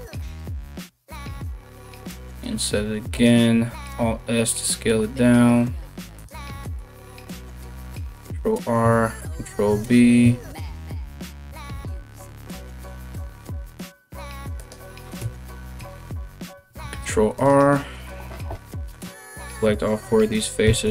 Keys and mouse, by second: 3.2 i, 3.3 alt+s, 7.4 ctrl+r, 8.4-20.9 ctrl+middle drag, 9.1 ctrl+v, 10.5 ctrl+b, 14.8 KP_1, 16.1 ctrl+r, 18.1 3, 18.3 right click, 18.8 shift+right click, 19.0 shift+right click, 19.3 shift+right click, 20.2 shift+d.